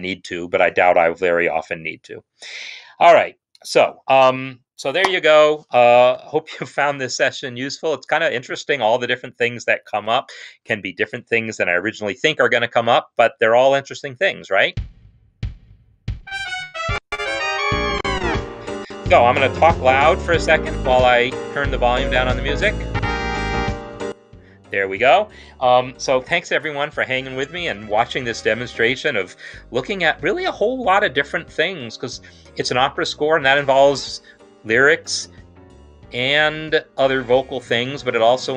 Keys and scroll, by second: 6.1 ctrl+s, 11.5 ctrl+Home, 14.4 space, 20.0 ctrl+super+0, 22.2 shift+Right, 22.7 Right, 23.5 shift+Right, 23.9 typing.